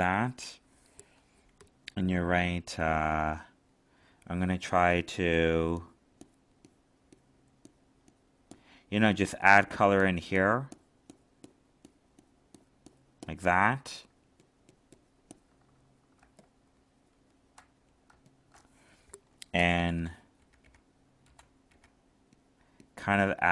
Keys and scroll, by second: 16.1 alt+space.